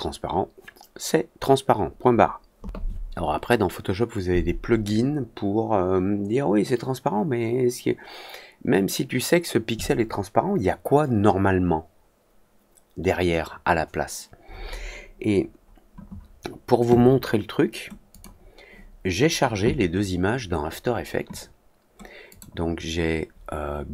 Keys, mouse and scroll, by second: 18.0 click, 22.2 click.